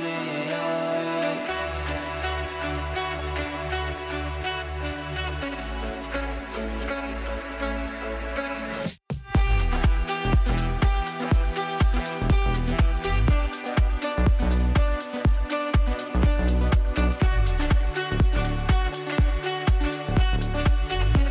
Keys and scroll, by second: 10.5 ctrl+z, 12.7 ctrl+z, 14.8 g.